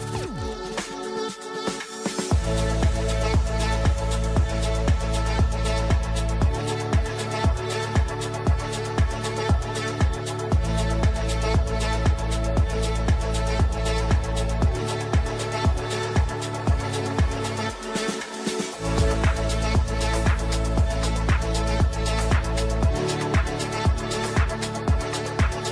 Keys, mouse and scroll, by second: 0.3 click, 0.6 shift+F2, 1.8-4.1 drag, 4.1 ctrl+right click, 6.2 click, 7.1 F3, 8.3 click, 8.6 F4, 9.6 click, 10.0-11.6 shift+drag, 11.6 F2, 12.1-15.7 drag, 15.7 shift+Page_Up, 16.3 click, 16.4 ctrl+r, 16.9 shift+click, 17.2 e, 18.0 click, 19.1-23.7 drag, 24.0 c, 24.5 click, 25.5-25.7 drag.